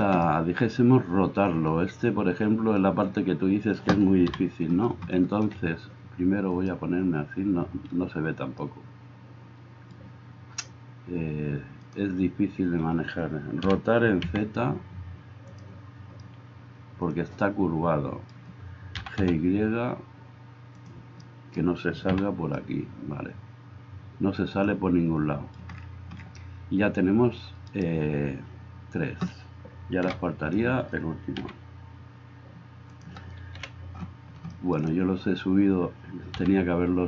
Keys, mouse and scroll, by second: 4.3 KP_7, 6.6 click, 7.4-11.9 middle drag, 11.9-13.7 drag, 13.7-37.0 middle drag, 13.7 r, 19.0 g, 22.6 a, 27.8-30.1 right drag, 30.1 KP_7, 31.5 g, 33.5 KP_1, 36.4 g.